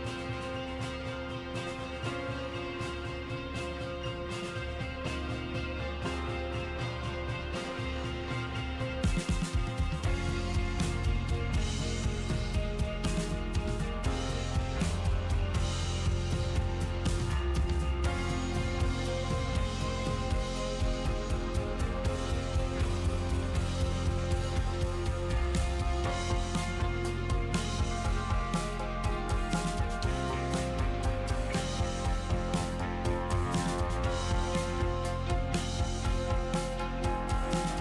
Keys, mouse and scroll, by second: 3.1 click, 7.1 click, 7.7-8.3 scroll down 11, 8.7-9.0 scroll down 1, 9.0-9.8 scroll up 2, 9.8 click, 11.3 click, 12.0-12.5 scroll down 6, 13.1-15.1 middle drag, 15.1-17.3 scroll up 4, 17.3 click, 17.9-19.6 drag, 19.8 middle click.